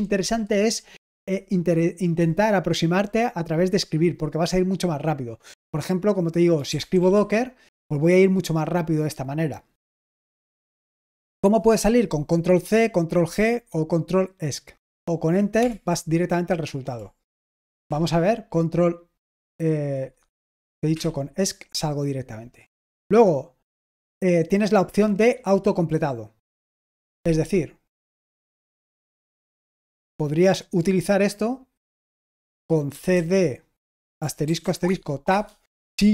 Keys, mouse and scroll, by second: 6.3-7.4 typing, 10.3-12.5 scroll down 1, 15.6 Return, 17.2 ctrl+p, 17.8 Return, 20.9 Escape, 23.0-24.0 scroll down 1, 24.0-24.6 scroll down 1, 24.6-26.2 scroll up 1, 26.2-27.3 drag, 30.3-33.6 drag, 32.8-34.6 typing, 34.8 Tab, 35.3 Tab.